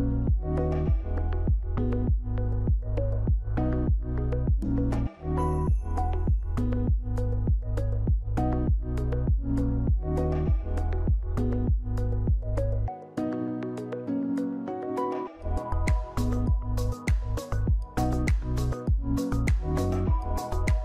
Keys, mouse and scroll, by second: 17.2 click.